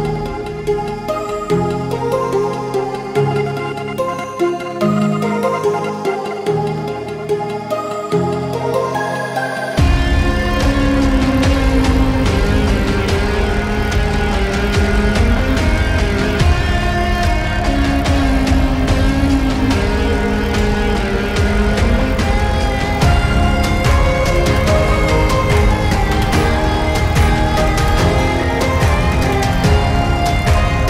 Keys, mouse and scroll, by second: 0.8-2.0 right drag, 2.0-3.5 drag, 3.5 shift+., 4.9 s, 5.0 e, 5.2 t, 7.8 v, 8.1 a, 8.2 l, 8.4 u, 8.9 Return, 9.8 Left, 10.2 Return, 11.4-12.1 typing, 13.0-15.5 drag, 17.6 Return, 19.1 shift+3, 19.2 space, 20.4-22.7 typing, 23.4 Return, 24.0-29.7 typing, 27.2 Return, 30.8 a.